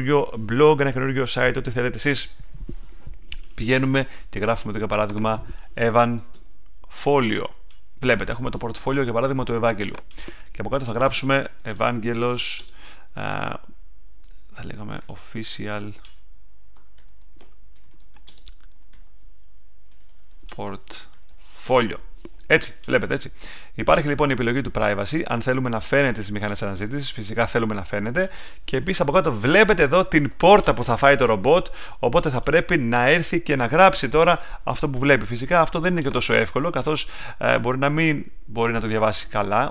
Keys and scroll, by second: 5.6-7.0 typing, 11.1-13.0 typing, 14.7-22.1 typing.